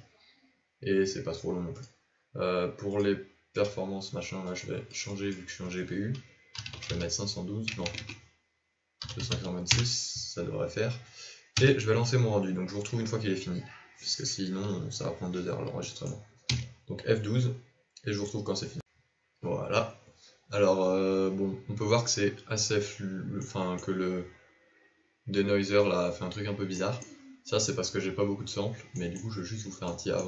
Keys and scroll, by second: 7.8 BackSpace, 7.9 BackSpace, 11.5 KP_0, 17.6 F12.